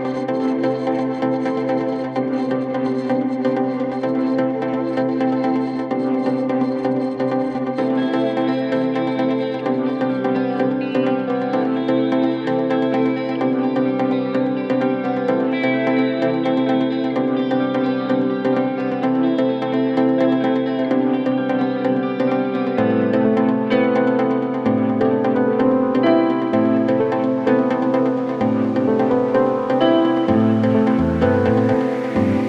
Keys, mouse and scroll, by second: 0.3-0.9 scroll up 3, 0.9 r, 1.1 double click, 1.2 right click, 1.9 double click, 2.4 p, 3.5-4.1 typing, 3.8 Return, 4.4 middle click, 4.8 scroll down 7, 4.9 middle click, 5.5 scroll down 1, 5.5 scroll up 6, 5.7 scroll down 3, 6.0 middle click, 6.4 scroll up 10, 6.6 middle click, 7.1-7.5 scroll down 14, 7.5 scroll up 9, 8.1-8.9 typing, 10.3 Escape, 10.4 space, 10.8 middle click, 10.8-11.2 scroll down 11, 11.3 scroll up 5, 11.4 middle click, 11.7 scroll down 5, 11.9 scroll up 1, 12.3 m, 13.8 Escape, 13.9 space, 14.3 m, 17.0 Escape, 17.2 scroll down 6, 17.4 scroll up 5, 17.5 middle click, 17.8 scroll down 2, 18.0 scroll up 2, 18.8 scroll down 5, 19.2 middle click, 20.6 Delete, 21.0 scroll down 3, 21.3-21.9 scroll up 15, 21.9 scroll down 6, 22.0 middle click, 22.3 scroll up 3, 23.9-25.3 scroll down 7, 27.8-29.3 scroll down 14, 30.2 scroll down 14, 30.4 middle click, 30.7 middle click, 31.0 scroll up 3, 31.2 middle click, 31.9 scroll down 1.